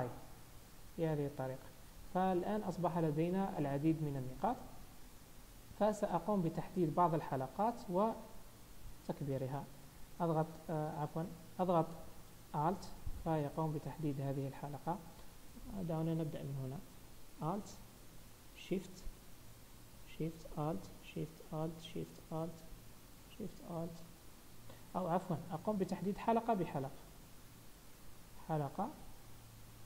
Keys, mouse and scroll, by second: 0.1 click, 1.6 z, 2.4-3.2 scroll up 4, 2.7 Tab, 3.5 shift+middle click, 4.6-5.5 scroll down 1, 6.4 click, 8.4 scroll up 1, 10.7 click, 10.7 scroll up 1, 11.9 alt+click, 12.8 click, 15.4 scroll up 1, 16.0 scroll down 1, 17.5 alt+click, 19.0 alt+shift+scroll up 1, 19.5 scroll up 1, 20.5 alt+shift+click, 25.5 ctrl+z, 28.2 click, 29.1 alt+click.